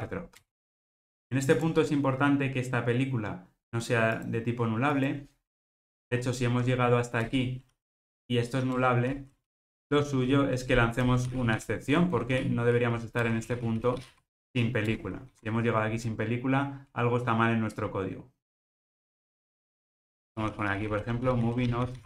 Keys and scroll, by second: 0.5 Return, 13.3 Return.